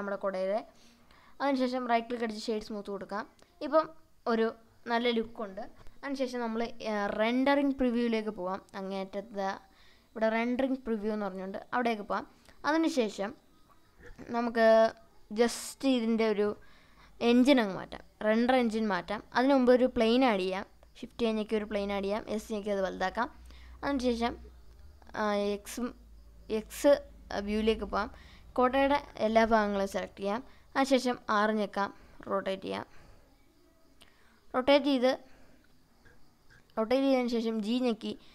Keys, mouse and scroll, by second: 0.4 Tab, 1.4 right click, 2.9-4.3 middle drag, 6.0 click, 7.8-9.0 middle drag, 9.2 scroll down 1, 9.6-12.8 middle drag, 13.1-14.0 scroll down 2, 14.2-14.6 shift+middle drag, 14.9-16.6 middle drag, 17.7 shift+a, 21.5 s, 22.7 click, 24.7 click, 26.5-27.8 drag, 30.2 r, 31.0 x, 36.3 click, 37.4 g.